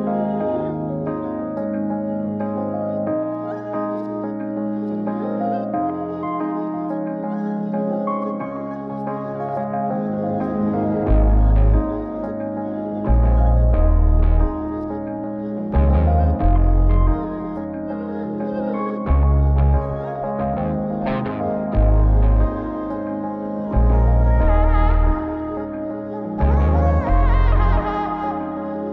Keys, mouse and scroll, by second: 0.9 click, 1.8-2.6 middle drag, 3.5 click, 7.0 click, 8.3 click, 9.3 click, 13.1-20.1 drag, 21.0 click, 22.6 click, 23.7 click, 24.5 scroll down 2, 24.9-27.5 middle drag, 28.7 click.